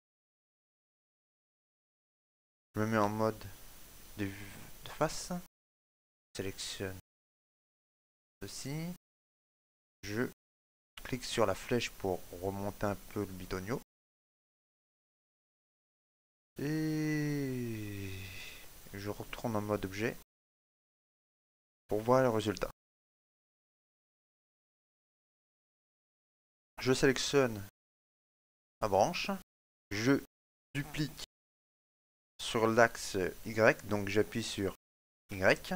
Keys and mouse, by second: 1.1 shift+middle click, 1.5 middle click, 2.1 click, 3.1 KP_1, 5.1 shift+middle click, 5.9 shift+click, 6.0 shift+middle click, 6.1 ctrl+shift+z, 6.1 shift+middle click, 6.1 click, 6.1 shift+right click, 6.5 right click, 7.6 middle click, 9.5 click, 14.4 middle click, 15.7 shift+middle click, 16.1 middle click, 19.0 click, 20.7 shift+middle click, 21.1 ctrl+middle click, 21.7 shift+middle click, 21.9 middle click, 25.6 shift+middle click, 26.0 middle click, 27.2 right click, 28.4 shift+middle click, 28.7 middle click, 31.2 shift+d.